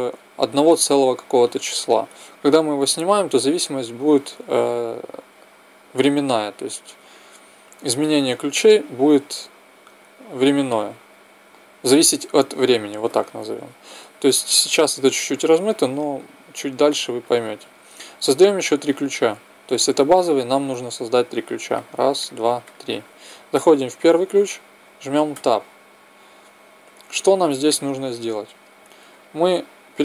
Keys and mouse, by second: 2.4-4.2 drag, 16.0-22.7 drag, 25.3 Tab.